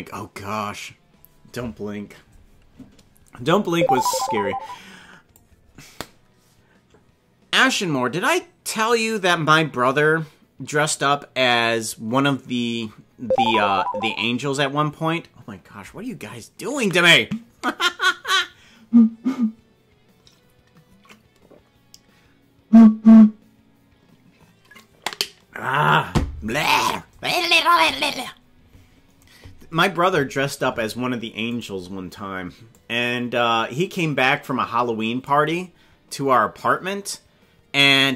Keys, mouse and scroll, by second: 3.9-5.3 drag, 31.7 right click, 32.7-35.2 drag.